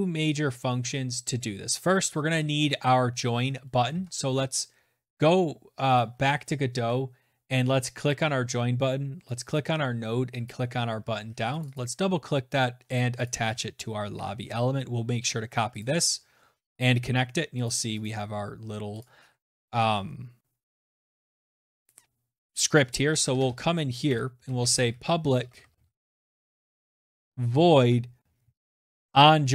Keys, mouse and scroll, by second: 2.5 alt+Tab, 4.6 click, 6.4 click, 8.0 click, 9.1 click, 10.4 click, 11.9 click, 12.1 ctrl+a, 12.8 ctrl+c, 14.4 click, 16.3 click, 16.7 click, 17.6 click, 21.4 click, 21.9 Return, 22.0 Return, 22.7 Tab, 22.8-29.2 typing, 23.4-25.7 drag.